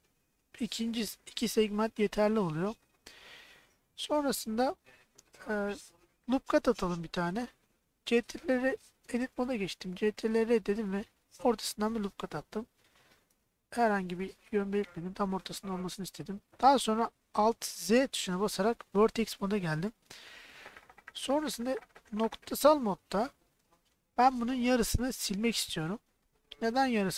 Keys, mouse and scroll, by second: 3.3 shift+middle click, 8.1 ctrl+r, 9.3 Tab, 10.1 ctrl+r, 13.2 right click, 14.9 middle click, 16.9 middle click, 17.8 alt+z, 19.4 KP_1, 22.2 click, 24.4-25.8 drag.